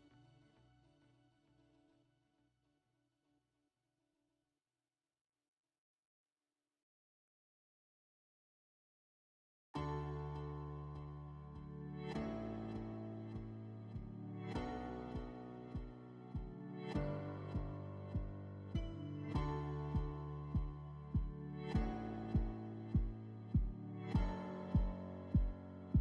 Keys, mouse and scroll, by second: 0.8-2.3 drag, 3.6 middle click, 5.3 click, 16.5-18.1 drag, 18.8-20.4 drag, 21.1-22.7 drag.